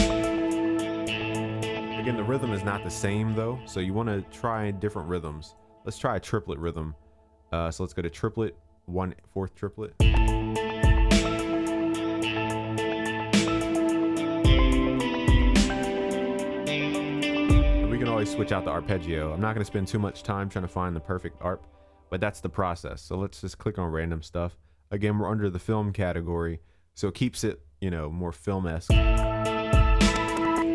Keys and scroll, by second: 1.6 ctrl+s.